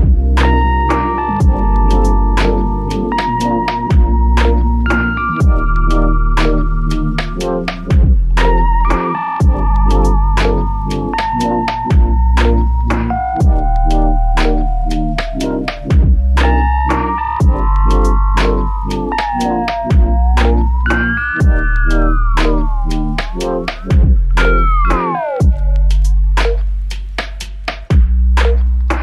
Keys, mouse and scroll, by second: 1.6-2.4 typing, 2.6 Return, 7.3 ctrl+click, 8.9 q, 9.1 alt+click, 11.5 alt+click, 13.4 ctrl+click, 15.8 ctrl+click, 17.9 ctrl+click, 19.6 w.